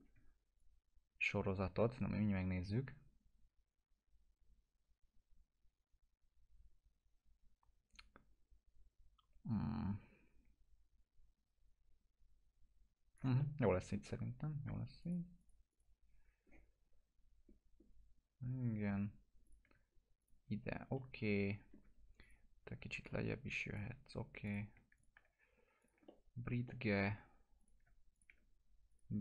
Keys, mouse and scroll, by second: 0.6-2.7 shift+drag, 13.4-15.0 alt+middle drag, 15.0 click, 17.1 scroll up 1, 18.9-19.2 scroll down 1, 19.4 ctrl+click, 20.2 click, 20.7 scroll down 1, 20.9-21.9 alt+middle click, 22.2 click, 22.6 w, 23.0-23.9 drag, 25.0 ctrl+click, 25.8 click, 26.1-27.0 alt+middle click, 27.6 click, 28.1 ctrl+click, 28.9 click, 29.1 scroll down 1.